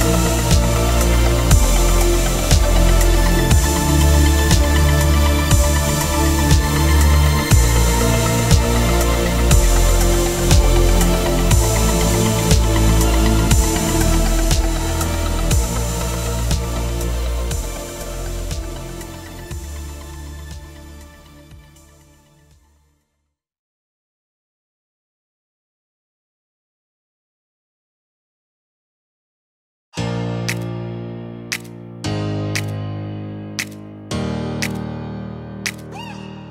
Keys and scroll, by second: 0.0-1.0 typing, 1.5 Return, 2.7 v, 2.9 Down, 3.3 Up, 5.8 Down, 8.0 Down, 10.5 ctrl+t, 11.1 Return, 12.2 Up, 13.0 Down, 15.3 Up, 15.8 Down, 17.4 Up, 21.8 ctrl+t, 24.6 Return, 26.8 Down, 28.0 ctrl+t, 28.5 Right, 29.0 Return, 31.8 ctrl+=, 32.0 ctrl+-, 32.7 ctrl+=, 33.5 ctrl+-, 34.4 F9.